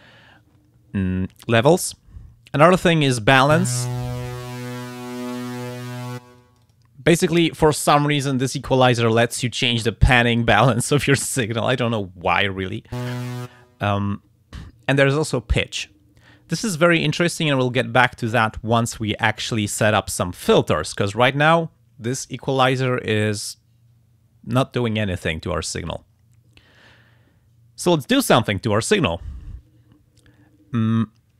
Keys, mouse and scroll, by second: 4.0-6.2 drag, 6.4 click.